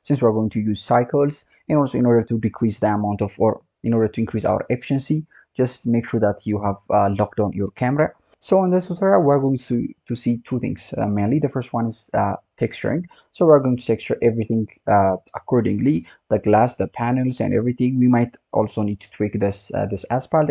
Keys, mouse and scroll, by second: 2.0-3.8 scroll up 2, 3.8-6.8 scroll down 1, 17.4-18.5 scroll up 3, 18.5 click, 19.4-20.5 scroll down 1.